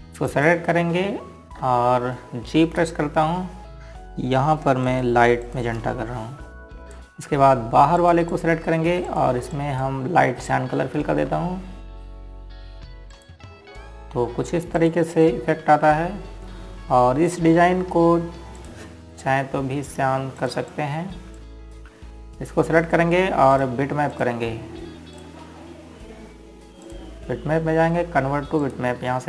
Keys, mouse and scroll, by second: 3.3 ctrl+z, 4.1-4.8 typing, 6.6 click, 10.8 ctrl+click, 11.2 click, 12.7 ctrl+z, 14.3 click, 17.2-17.6 scroll down 1, 19.0 click, 20.8-21.3 scroll up 1, 22.1 click.